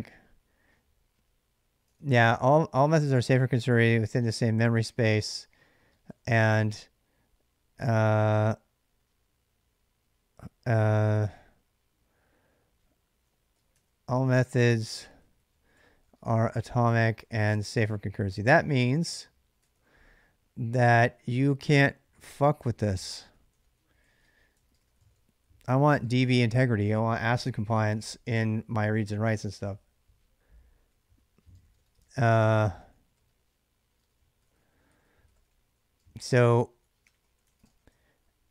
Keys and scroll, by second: 1.5-3.1 typing, 4.2 typing, 5.4-6.5 typing, 11.8-26.7 typing, 13.5 ctrl+[, 25.6 ctrl+[, 30.7-38.5 typing.